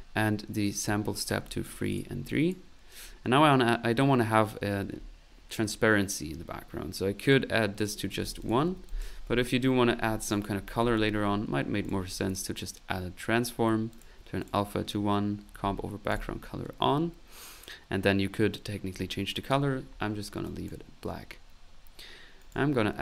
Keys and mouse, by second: 0.6 click, 1.5 click, 2.3 click, 2.9 middle click, 7.2-9.4 drag, 8.6 ctrl+z, 10.2 ctrl+right click, 10.6-11.5 typing, 11.8 click, 12.3 click, 13.9 click, 16.1 click, 19.3 click, 20.5 click, 22.4 right click, 22.7-23.0 typing.